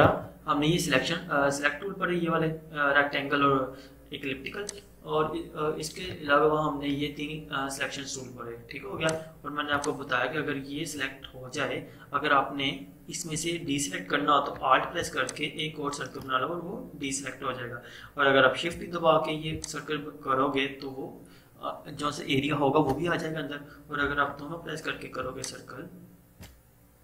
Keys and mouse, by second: 0.1 right click, 4.7-6.2 drag, 6.2 right click, 9.0-14.4 drag, 14.6 click, 15.3-19.6 alt+drag, 19.6-25.3 shift+drag, 25.3-27.0 alt+shift+drag.